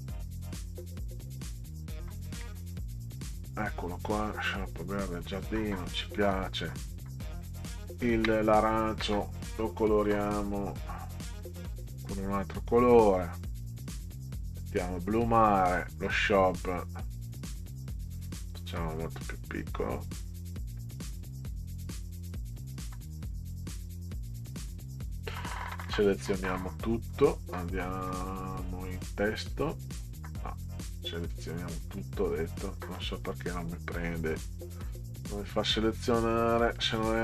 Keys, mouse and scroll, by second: 0.9 click, 4.1-5.1 drag, 6.3 middle click, 7.6 ctrl+click, 9.8 click, 13.0 click, 14.5 click, 15.8 scroll up 2, 16.1 click, 19.2 click, 23.0 click, 23.3 click, 23.5 click, 24.1 click, 24.5 click, 24.6 click, 25.7 ctrl+a, 28.9 click, 30.7 click, 30.9 click, 31.1 click, 31.3 click, 33.9 click, 35.5 click, 36.5 click, 36.7 click, 37.0 click.